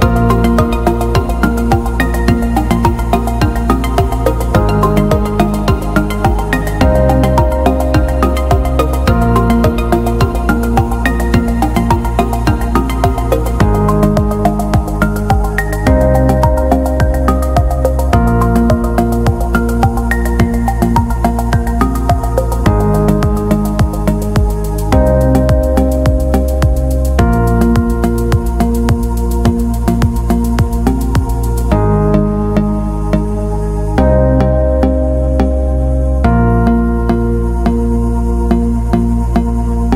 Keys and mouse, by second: 0.0 shift+right click, 0.7 g, 2.0 right click, 3.0 g, 4.2 right click, 4.6 shift+right click, 4.9 shift+right click, 7.8 g, 8.9 middle click, 9.7 middle click, 11.4 shift+middle click, 12.0 g, 13.6 shift+middle click, 14.1 w, 16.0 g, 17.6 middle click, 18.9 right click, 19.1 g, 20.9 Tab, 21.4 Tab, 21.8 right click, 21.9 g, 23.4 g, 25.1 middle click, 25.7 KP_3, 26.3 shift+middle click, 26.8 Tab, 27.5 middle click, 28.0 right click, 28.3 middle click, 29.3-29.9 middle drag, 30.6 KP_1, 31.0 KP_3, 31.6 shift+middle drag, 31.9 Tab, 32.5 shift+middle click, 33.7 shift+middle click, 34.5 middle click, 35.2 middle click, 36.1 shift+middle click, 36.3 KP_3, 38.6 right click, 39.0 g.